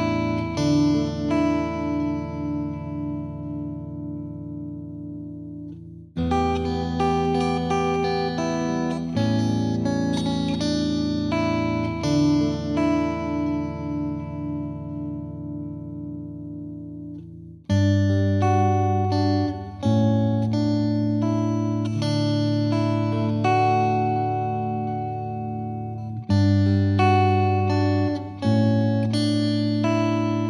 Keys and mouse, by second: 1.1 F2, 2.0 click, 2.4 click, 2.5 shift+click, 2.9 click, 3.3 click, 3.7 click, 3.7 click, 4.3 ctrl+z, 4.5 click, 5.1 click, 5.6 click, 5.7 click, 7.2 click, 7.6 click, 8.1 click, 8.4 Delete, 9.2 click, 9.2 click, 9.8 click, 12.5 click, 12.8 click, 12.9 click, 13.2 click, 14.1 click, 14.6 click, 14.8 click, 15.3 click, 16.5 click, 17.2 click, 18.0 click, 18.2 click, 18.8 click, 19.0 shift+click, 19.4 click, 21.2 click, 21.4 click, 22.6 click, 23.1 click, 24.0 click, 24.4 click, 24.8 click, 25.4 F2, 25.7 click, 26.5 click, 27.1 click, 27.7 click, 28.4 click, 29.4 click, 29.5 click, 29.9 click, 30.1 click.